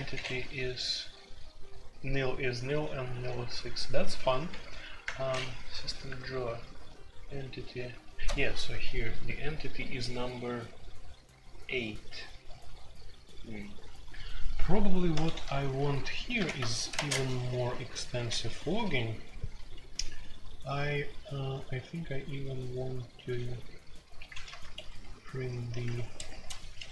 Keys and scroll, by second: 1.8 j, 2.4 j, 3.1 j, 4.5-6.1 typing, 7.6-7.9 typing, 15.2 super+j, 15.6 super+k, 16.4 alt+1, 16.9 space, 17.1 Tab, 18.1-19.6 typing, 23.2-26.9 typing, 24.4 Return.